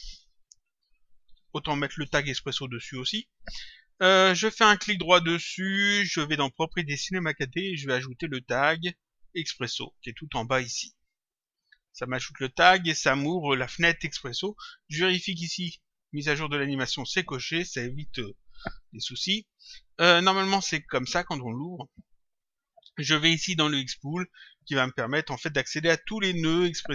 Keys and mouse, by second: 0.0-1.9 typing, 2.0 Return, 5.4 right click, 11.2 click, 14.9 click, 18.7 click, 20.4 click, 23.8 click.